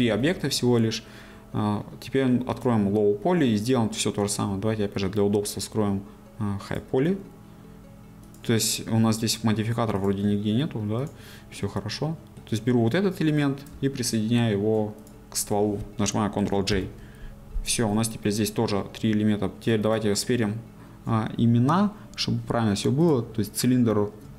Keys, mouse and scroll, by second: 2.5-11.5 drag, 11.5-15.1 middle drag, 15.1 shift+click, 16.7 ctrl+j, 20.2-24.3 drag.